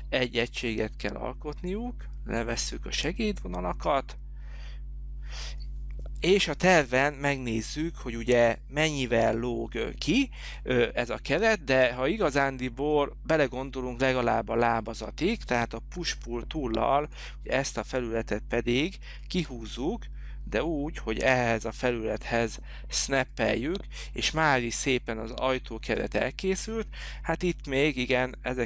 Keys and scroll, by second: 16.1 p.